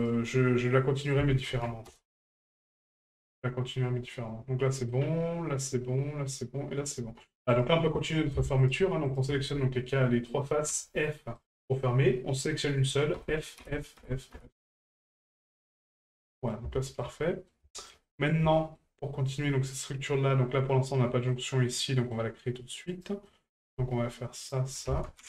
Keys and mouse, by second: 1.0 click, 2.7 shift+middle drag, 4.7 middle drag, 7.5 right click, 8.6 shift+right click, 9.1 shift+right click, 11.4 right click, 15.5 middle drag, 16.0 shift+middle drag, 16.3 middle drag, 16.7 shift+middle drag, 17.2-17.5 middle drag, 17.7 shift+middle drag, 18.0 middle drag, 18.5 shift+middle drag, 19.1 middle drag, 21.3-22.1 middle drag, 22.9 right click, 23.3 middle drag, 24.4 shift+right click.